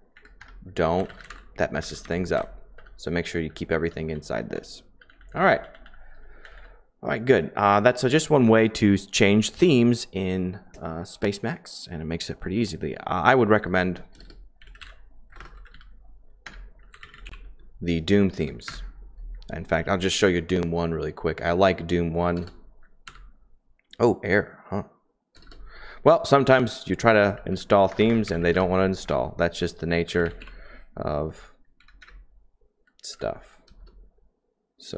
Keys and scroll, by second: 0.1 Right, 0.4 Return, 0.8-6.9 typing, 14.3-17.4 typing, 16.4 Return, 18.3 Down, 18.6 Return, 18.6 Up, 20.9-22.4 typing, 23.0 Escape, 25.3 space, 25.4 space, 27.1-28.5 typing, 29.0 Return, 29.7-30.4 typing, 31.7 Down, 32.0 Up, 33.1 Escape, 33.6 space, 33.7 space, 34.8-34.9 typing.